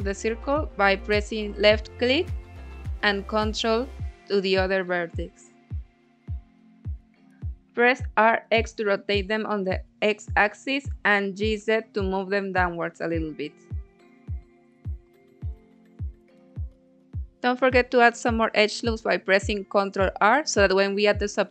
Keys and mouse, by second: 0.7 ctrl+click, 1.1-2.3 middle drag, 2.3 click, 3.1 ctrl+click, 3.7 middle click, 4.3 click, 5.5 g, 5.8 z, 6.7 Escape, 7.2 r, 7.8 x, 9.9 click, 10.2 g, 10.5 z, 12.7 click, 13.0-16.0 middle drag, 17.2 ctrl+r, 19.6 click, 20.0 ctrl+r.